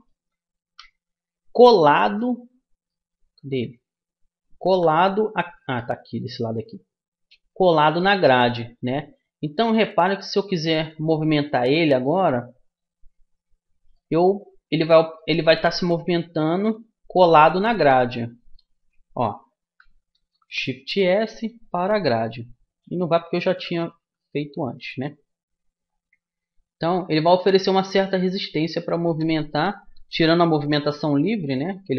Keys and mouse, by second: 0.9 KP_1, 3.1-4.8 middle drag, 4.9 KP_3, 6.0-7.8 middle drag, 8.2-10.0 middle drag, 10.0-11.8 drag, 13.0-14.8 drag, 15.0-16.8 drag, 18.4-20.1 drag, 21.0 shift+s, 23.7 ctrl+z, 26.3-29.2 drag, 29.2 middle click, 30.2 g.